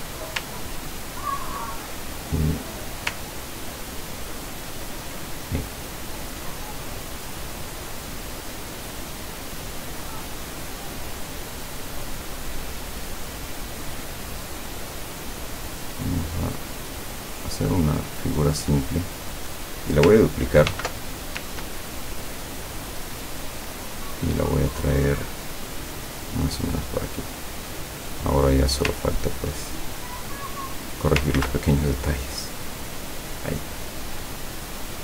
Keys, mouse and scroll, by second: 0.9-1.4 ctrl+scroll up 4, 2.0-3.5 ctrl+drag, 3.8 ctrl+scroll down 2, 4.8 ctrl+scroll down 2, 9.7 click, 10.6 click, 12.1 click, 13.6 click, 14.9 click, 16.6 click, 18.1 click, 19.6 click, 20.8 ctrl+d, 21.8-27.0 ctrl+drag, 27.2-27.7 drag, 28.1 click, 29.1-29.4 ctrl+scroll up 2, 30.0 ctrl+click, 30.4 scroll up 2, 31.4 ctrl+z, 32.3 click, 32.8-34.2 drag, 34.9-35.0 drag.